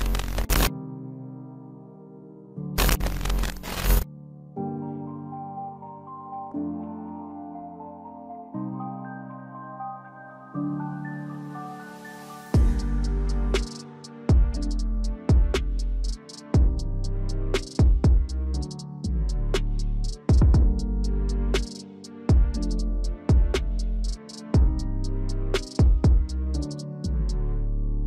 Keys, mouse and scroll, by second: 3.4 right click.